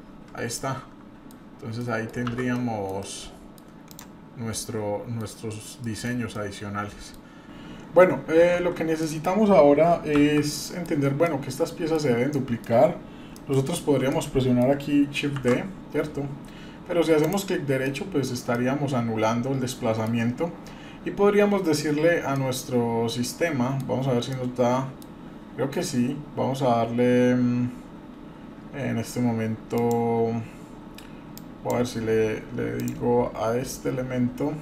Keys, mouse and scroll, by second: 0.6-1.3 middle drag, 1.5-1.8 scroll up 1, 1.8 middle click, 2.3 shift+z, 2.5 scroll down 1, 2.5-2.9 middle drag, 3.0-3.6 middle drag, 3.9 drag, 4.4 scroll up 1, 4.5-5.2 middle drag, 5.5 scroll up 1, 5.8 middle click, 6.1 scroll down 1, 6.4-7.2 middle drag, 8.0 click, 9.0 click, 9.1 middle click, 10.1 shift+z, 10.5-10.8 middle drag, 11.0 scroll up 2, 11.2-11.9 middle drag, 12.3 middle click, 13.3 middle click, 14.1-14.6 middle drag, 15.4 shift+d, 17.8 middle click, 18.5-20.0 middle drag, 22.3-23.8 middle drag, 24.3 middle click, 29.7-32.9 drag.